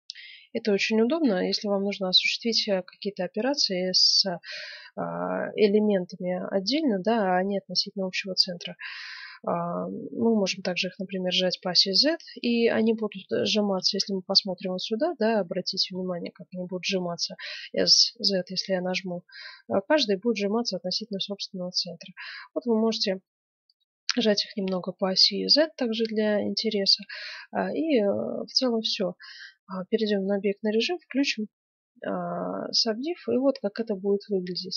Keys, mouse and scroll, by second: 1.9-5.1 middle drag, 7.3-10.2 middle drag, 7.3-7.7 scroll down 1, 10.2 s, 11.0 middle click, 12.5 middle click, 13.3 middle click, 13.6 middle click, 16.2 s, 16.4 middle click, 23.9-24.4 scroll down 1, 24.4-27.8 middle drag, 27.4 Tab, 30.2-32.0 drag, 31.2-34.7 middle drag.